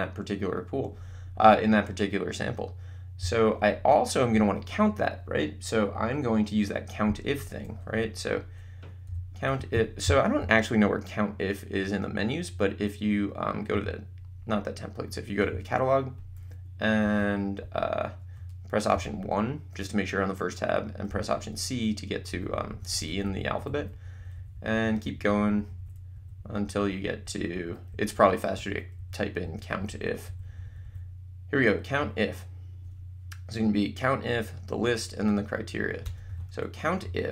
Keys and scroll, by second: 9.1 c, 9.5 BackSpace, 17.0 Left, 19.0 1, 21.1 c, 22.3 Down, 36.1 Return.